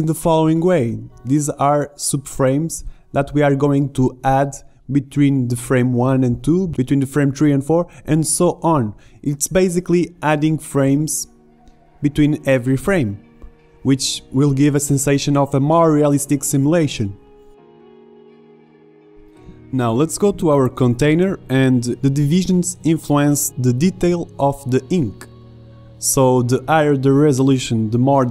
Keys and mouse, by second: 3.4-5.5 drag, 9.3-11.4 drag, 13.2 alt+a, 14.3 alt+a, 15.1-16.8 drag, 18.5-21.3 drag, 21.3 i, 23.4 a, 23.7 b, 24.4 g, 25.5 click.